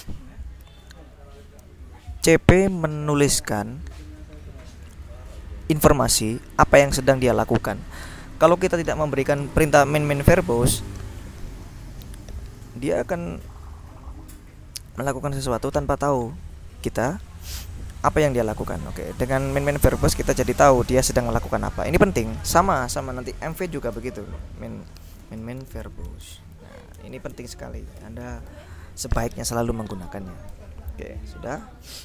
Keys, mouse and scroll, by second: 2.8-6.8 drag, 7.4-9.0 drag, 9.2 click, 13.3 click, 20.5 click, 22.0 click, 23.6-29.1 typing, 30.5 BackSpace.